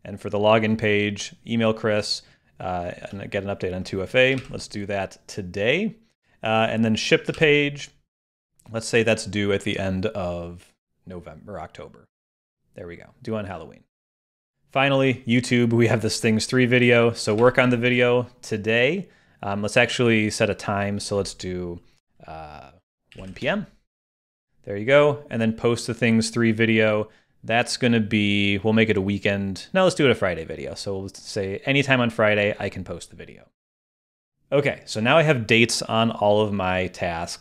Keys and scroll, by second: 4.4 super+s, 7.4 super+s, 17.4 super+s.